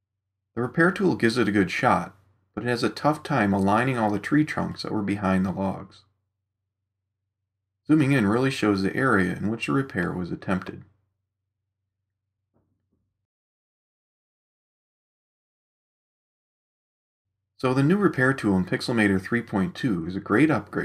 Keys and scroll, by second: 8.1 super+=, 9.7 super+space, 18.5 super+0.